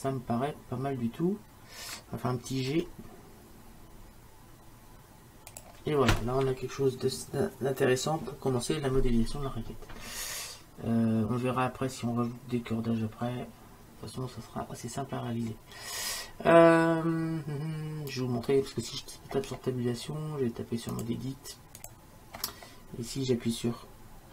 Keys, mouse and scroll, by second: 2.7 g, 8.7-11.9 middle drag, 8.7-9.3 scroll up 1, 9.3-11.9 scroll down 1, 15.5-19.2 middle drag, 19.4 Tab, 22.2-24.3 drag.